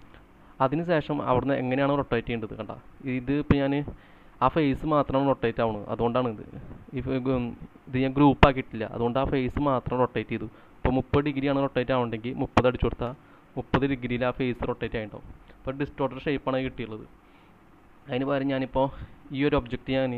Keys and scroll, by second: 12.2-13.0 typing, 14.4 space, 16.7-18.2 typing.